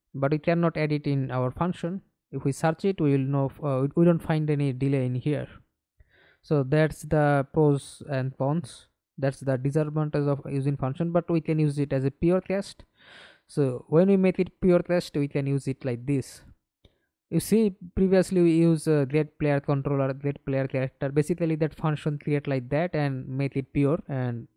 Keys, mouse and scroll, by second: 0.3-1.7 typing, 2.6-3.6 scroll down 14, 3.7-6.1 scroll up 18, 6.1 right click, 14.3 right click, 17.4 Delete, 23.0 double click, 23.7 right click.